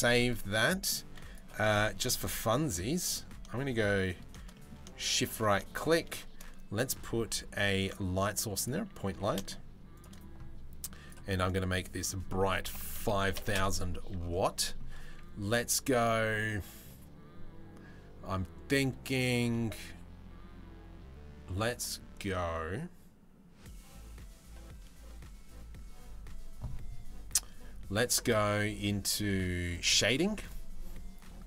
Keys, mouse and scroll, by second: 0.1-0.5 middle drag, 0.7 z, 1.8-2.1 middle drag, 2.3 z, 2.7 middle click, 3.5 middle click, 4.1 middle click, 4.6 middle click, 5.6 shift+a, 8.7 g, 11.6-13.2 middle drag, 12.5 KP_0, 14.2 middle click.